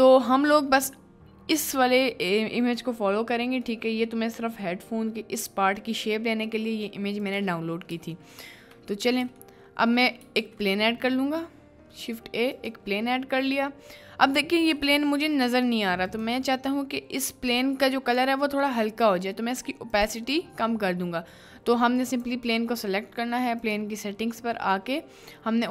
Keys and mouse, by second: 0.4 middle drag, 3.7-4.1 middle drag, 7.2 click, 8.3 shift+middle click, 9.5-10.1 shift+middle drag, 10.3 shift+a, 14.7 g, 16.2 click, 19.9 click, 22.1 click, 23.6 click.